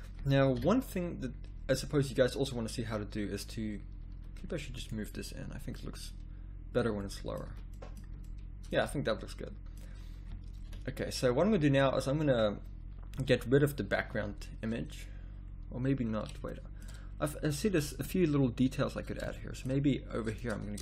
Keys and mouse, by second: 0.5 KP_1, 4.0 z, 4.1 z, 7.4 z, 8.0 z, 8.8 a, 10.6 KP_1, 13.1 n, 17.7 middle click, 17.9 middle click, 18.1-19.5 middle drag, 19.6-20.8 drag.